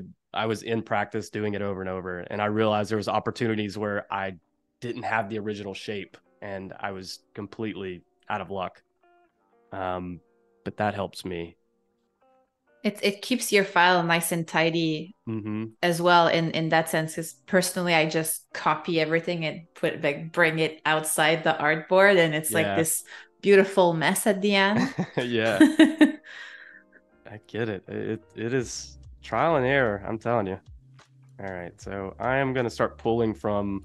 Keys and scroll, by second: 18.2 space, 20.0 i, 20.4 space, 21.7 a, 22.9 space, 28.8 super+-, 29.3 space, 31.9 space.